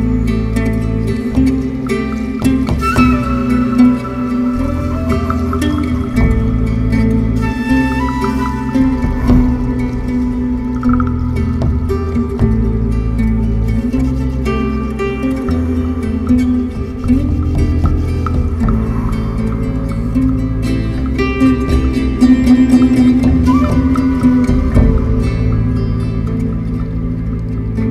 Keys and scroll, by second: 15.4 3, 18.1 4, 20.6 3.